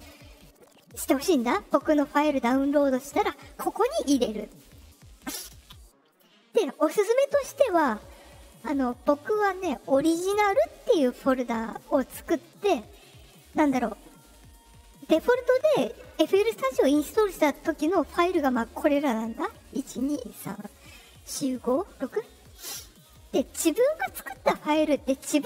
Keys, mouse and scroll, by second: 4.4 click, 4.6 click, 6.0 click, 8.7 click, 13.1 click, 19.3 click, 19.8 click, 20.3 click, 21.1 click, 21.5 click, 21.9 click, 22.4 click, 22.9 click.